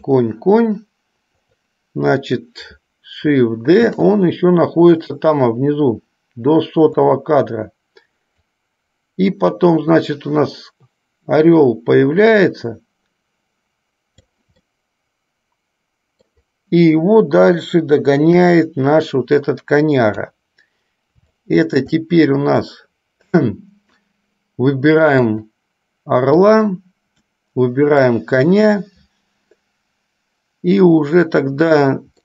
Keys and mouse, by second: 4.0 shift+d, 8.7-14.5 drag, 14.8-16.7 middle drag, 18.5 KP_5, 21.5-23.5 middle drag, 25.3 click, 28.2 shift+click.